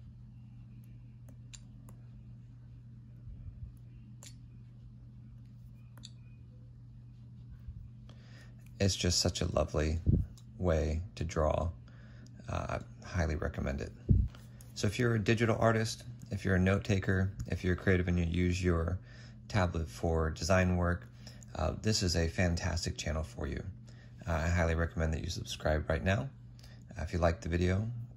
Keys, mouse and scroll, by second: 4.1 typing, 5.9 typing, 8.6-11.8 typing.